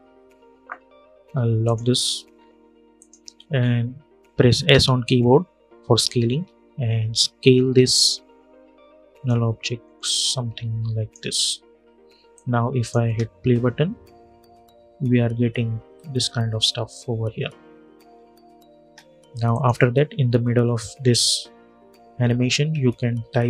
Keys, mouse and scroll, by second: 1.7 scroll up 1, 2.7 click, 4.4 s, 5.7-12.7 drag, 12.7 space, 18.5 space, 19.2 click, 21.2 u, 21.8 u, 22.9 ctrl+t.